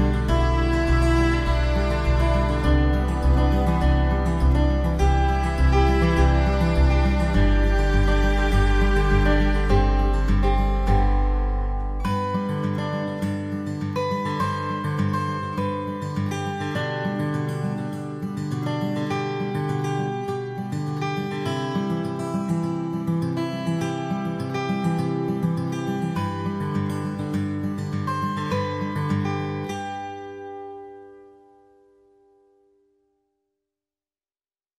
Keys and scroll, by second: 31.5 ctrl+=.